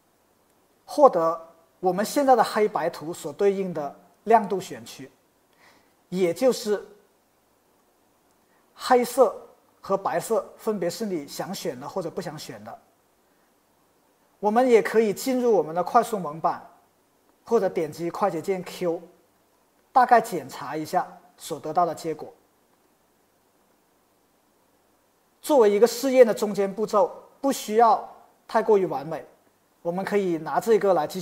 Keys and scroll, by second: 19.4 q, 22.8 q, 23.7 q, 24.7 q.